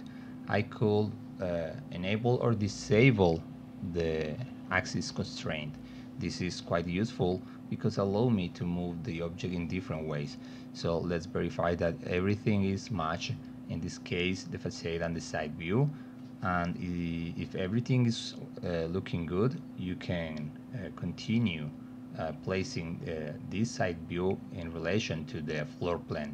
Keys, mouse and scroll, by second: 0.0 alt+d, 7.4 middle click, 8.9 middle click, 9.5 middle click, 10.2 middle click, 10.9-11.4 alt+middle drag, 15.8 middle click, 18.1 middle click, 21.2 alt+middle click, 21.6 middle click, 22.2 middle click, 23.5 click, 24.8-26.3 drag.